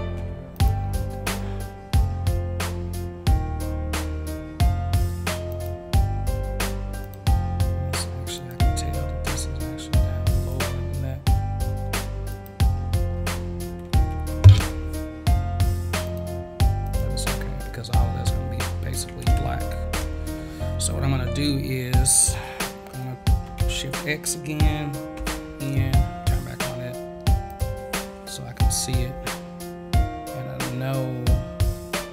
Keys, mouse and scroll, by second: 0.2 ctrl+z, 0.5 click, 2.1-2.5 scroll up 1, 5.5 click, 7.0 click, 8.3 click, 10.5 click, 12.3 click, 16.0 click, 16.8 click, 23.6 shift+x, 27.4 click, 31.1 click, 31.5 click, 31.8-32.1 drag.